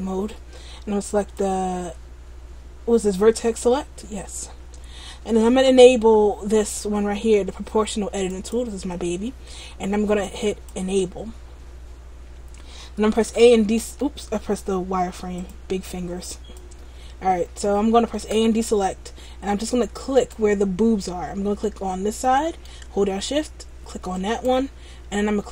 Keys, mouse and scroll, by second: 1.3 click, 8.4 click, 13.4 a, 13.4 z, 13.9 a, 15.5 click, 18.4 a, 20.1 right click, 21.9 middle click, 24.2 shift+right click.